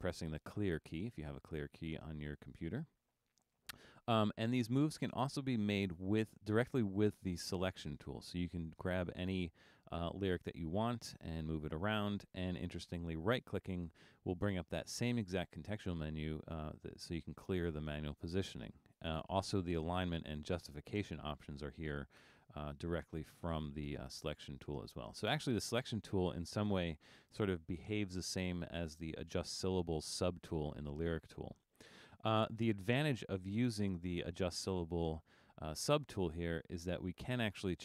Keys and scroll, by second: 0.4 9.